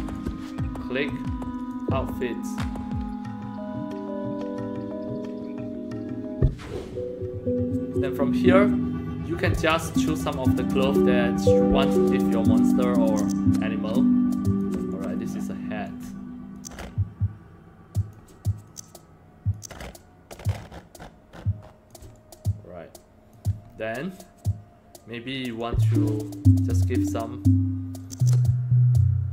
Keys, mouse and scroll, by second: 0.0 click, 1.5 click, 9.2 click, 11.4 click, 13.0-14.5 drag, 14.9 alt+click, 16.5-18.0 drag, 18.6 click, 19.5 click, 22.1-23.3 alt+drag, 23.6 scroll up 1, 25.5 click, 28.0 click.